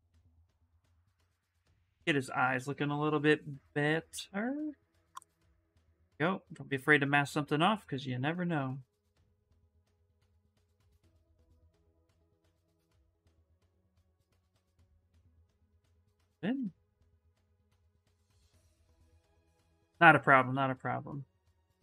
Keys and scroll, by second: 6.5 s, 13.5 s.